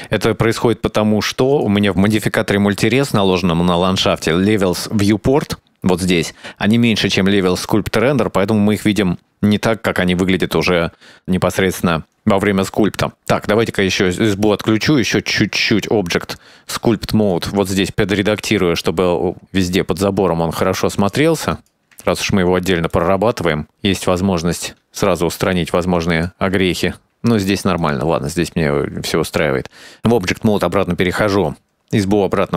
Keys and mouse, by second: 1.5 click, 1.9 click, 2.2 right click, 8.9-12.6 drag, 14.3 click, 15.8-17.3 drag, 18.3-20.3 drag, 20.9 click, 21.3 click, 21.7 click, 22.0 shift+middle click, 22.9 click, 23.2 shift+middle click, 24.4 click, 25.5 click, 25.9 click, 26.3 shift+middle click, 27.5 click, 27.9 click, 30.7 click, 32.3 click.